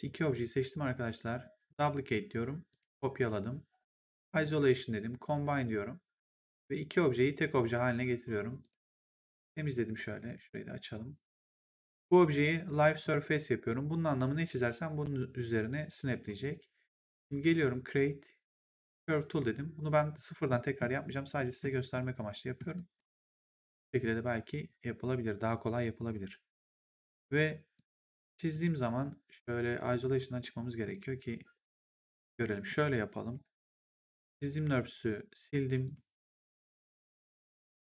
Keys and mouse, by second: 2.6 click, 4.3 click, 5.4 click, 8.5 click, 10.1 click, 12.9 click, 17.4 click, 19.3 click, 21.3 middle click, 23.8 click, 26.9 click, 29.8 click, 32.4 w, 33.6 Delete, 34.8 click, 37.6 ctrl+1.